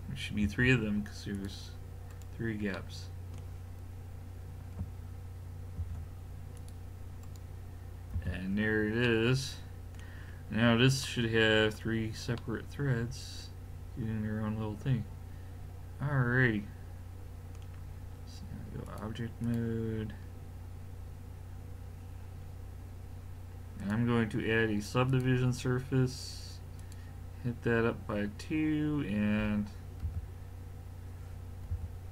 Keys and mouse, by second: 0.5 ctrl+r, 5.8 ctrl+r, 8.2 a, 14.1 middle click, 18.9 click, 20.6-23.2 middle drag, 23.8 click, 30.1 a, 31.7 a.